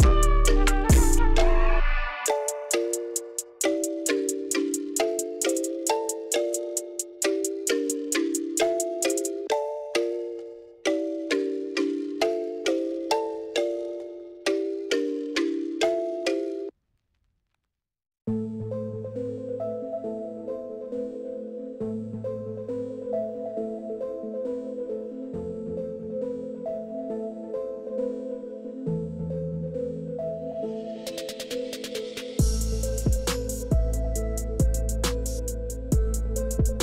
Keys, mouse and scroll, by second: 4.0 click, 5.5 click, 7.3 click, 9.2-10.2 drag, 11.0 click, 11.6 click, 13.1 click, 14.7 click, 15.4 click, 16.3 click, 17.0 click, 17.8 KP_4, 18.1 Return, 21.0 e, 23.8-28.5 typing, 32.8-34.7 middle drag, 34.9 d, 35.2-36.8 middle drag.